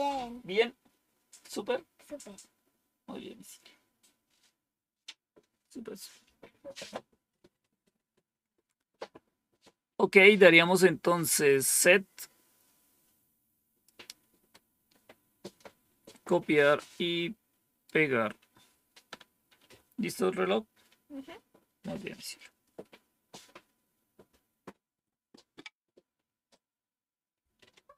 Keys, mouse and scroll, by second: 11.6-13.8 drag, 14.4 right click, 16.7-17.8 right drag.